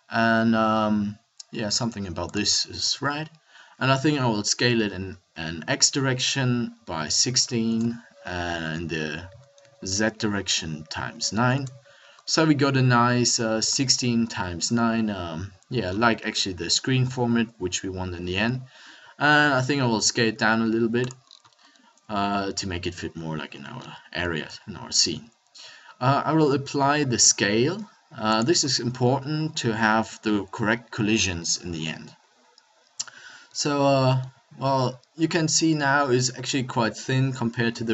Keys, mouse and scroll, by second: 3.0 KP_1, 4.5 s, 9.2 s, 12.3 middle click, 14.1-15.8 middle drag, 18.1-19.5 middle drag, 19.5 s, 21.3 click, 22.7 middle click, 23.5-28.7 middle drag, 24.4 ctrl+a, 31.0 middle click, 32.4-33.4 middle drag, 36.1 middle click, 37.7 s.